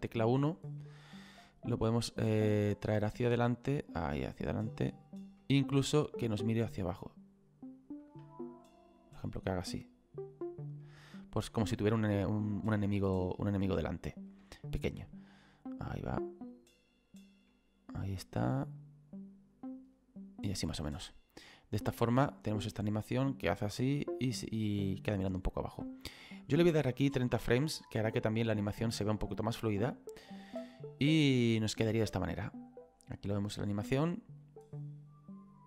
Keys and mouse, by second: 1.8 click, 6.3 click, 8.7 click, 11.6 middle click, 13.3 click, 14.6 shift+middle click, 15.8 click, 17.5 middle click, 18.8 click, 20.9 middle click, 21.8 click, 27.1 click, 28.4 click, 29.9 click, 30.2 space.